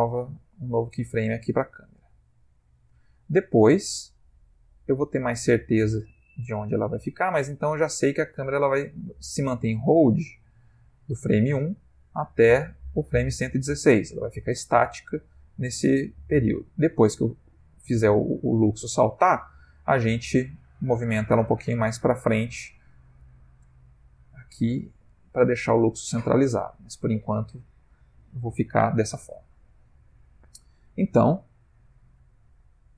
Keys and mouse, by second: 0.1 i, 1.4 click, 10.7 click, 19.0 click, 29.5 click.